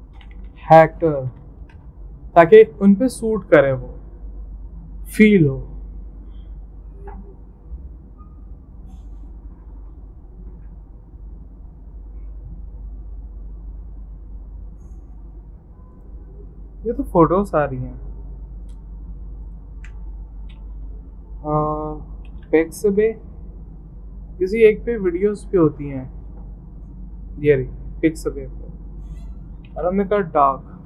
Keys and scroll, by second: 0.0-2.2 typing, 22.0-23.0 typing, 23.0 Return, 25.2-26.0 typing, 28.6-30.8 typing.